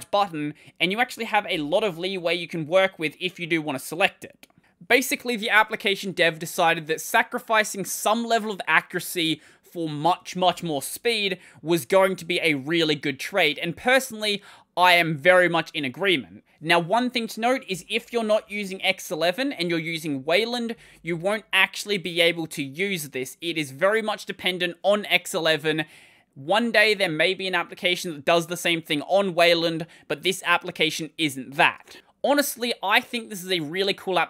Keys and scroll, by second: 1.4 ctrl+;, 17.5 ctrl+=, 17.8 ctrl+=, 17.9 ctrl+=, 18.1 ctrl+=.